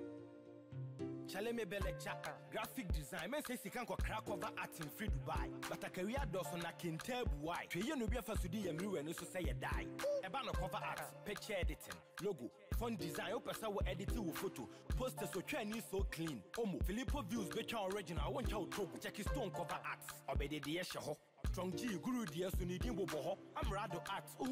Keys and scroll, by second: 0.1 ctrl+shift+s.